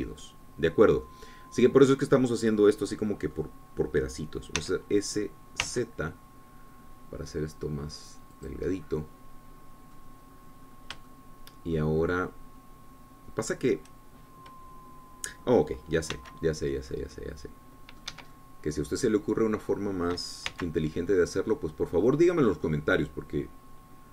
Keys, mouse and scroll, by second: 2.1 scroll down 2, 2.5-6.0 drag, 6.0 s, 7.0 z, 9.8 click, 10.2-11.6 scroll down 2, 11.8-12.3 scroll up 2, 12.5 shift+click, 17.6 c, 18.4-19.6 drag, 19.5 Escape, 19.8-21.7 drag, 21.9 c, 22.3-23.7 drag.